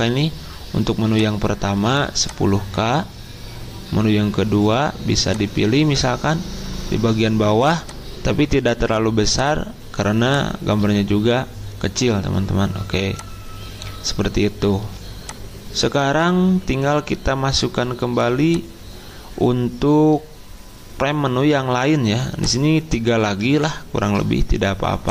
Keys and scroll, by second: 14.8 z.